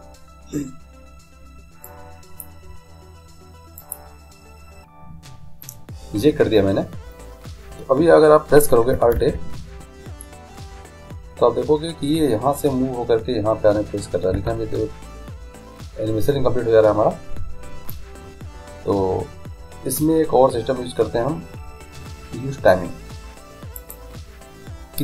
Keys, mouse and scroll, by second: 1.9-5.8 drag, 9.2 alt+a, 14.4 Escape, 23.8-25.0 drag.